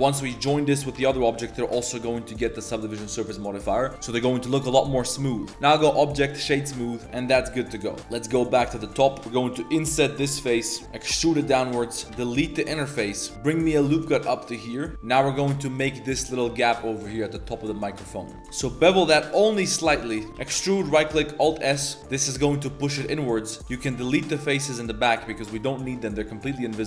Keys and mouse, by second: 0.0 shift+click, 1.1 ctrl+j, 3.1 click, 4.8 Tab, 5.0 z, 5.3 Tab, 5.5-6.4 drag, 6.6 z, 7.0 Tab, 7.0 drag, 7.0 g, 7.0 a, 7.5 click, 8.2 click, 8.3 Tab, 8.8 3, 9.1 shift+click, 9.2 shift+s, 10.2 i, 11.1 e, 12.1 x, 12.9 click, 13.3 ctrl+r, 18.4 ctrl+b, 20.5 e, 21.0 alt+s, 23.7 x, 25.7 shift+click, 26.1 click, 26.8 click.